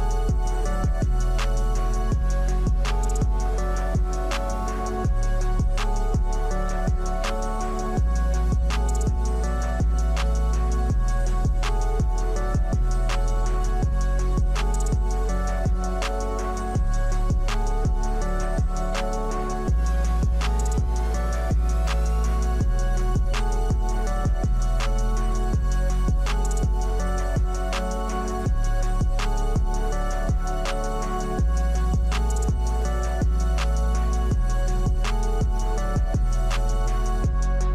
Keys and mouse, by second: 0.5-1.9 middle drag, 4.0-4.7 middle drag, 5.7 Tab, 8.4 ctrl+r, 11.9 Tab, 12.8 click, 14.7-16.1 middle drag, 16.5 KP_1, 17.6 click, 19.5 click, 21.0 shift+middle click, 24.5-25.2 middle drag, 25.4 click, 28.3 click, 28.8 middle click, 32.1 middle click, 34.9-35.8 drag.